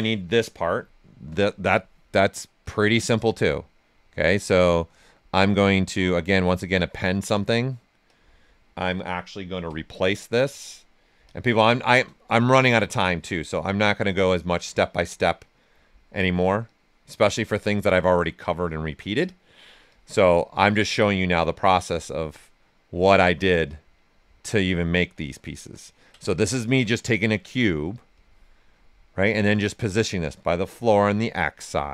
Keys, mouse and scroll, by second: 0.7 right click, 2.6 click, 6.3 click, 9.6 w, 10.4 click, 11.8 shift+f, 12.1 right click, 12.6 w, 13.2 click, 14.5 click, 15.6 right click, 15.9 shift+right click, 16.6 click, 17.5-19.1 drag, 19.1 click, 19.9 click, 20.7-22.1 drag, 22.1 right click, 23.1-25.0 drag, 25.0 right click, 26.1 ctrl+right click, 28.1 click, 28.5 right click, 31.4 click, 31.8 right click.